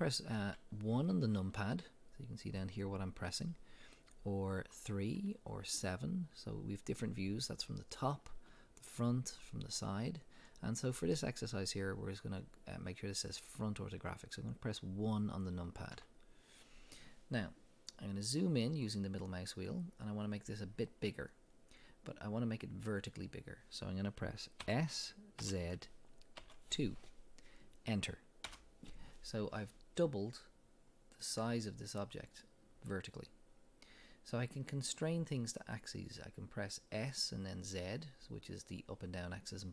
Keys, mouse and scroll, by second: 0.4 KP_1, 4.6 KP_3, 5.6 KP_7, 8.3 KP_1, 9.3 KP_3, 16.0 KP_1, 17.5-18.2 drag, 18.5-19.5 scroll up 2, 23.0-23.4 scroll up 1, 24.7 s, 28.6 Return, 31.2-38.2 middle drag, 34.7-35.5 scroll down 2.